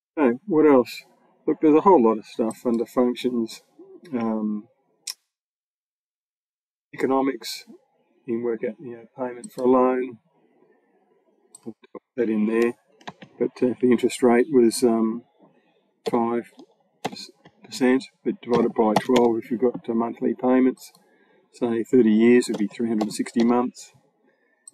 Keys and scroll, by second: 12.9 BackSpace, 15.9 5, 16.8 shift+5, 18.1-19.5 typing, 22.4 3.